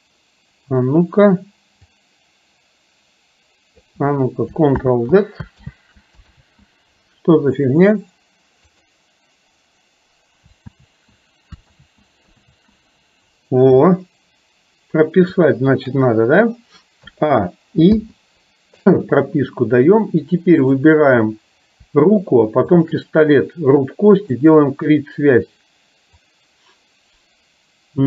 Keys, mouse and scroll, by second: 2.1-3.9 drag, 4.8 ctrl+click, 5.8 ctrl+z, 6.4 ctrl+z, 8.9 click, 10.9 ctrl+z, 11.9 ctrl+z, 12.6 ctrl+z, 15.6 shift+middle click, 17.1 a, 18.0 i, 20.9 drag, 22.8 shift+click, 26.4-28.0 drag.